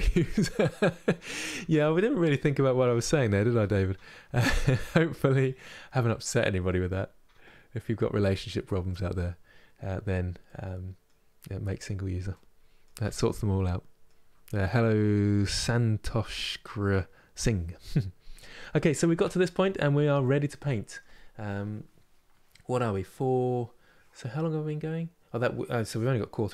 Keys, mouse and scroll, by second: 9.6-10.2 scroll down 1, 10.2-17.8 middle drag, 17.8 scroll down 1, 18.3-19.3 middle drag, 19.3-19.9 scroll up 3, 19.9-26.5 shift+middle drag.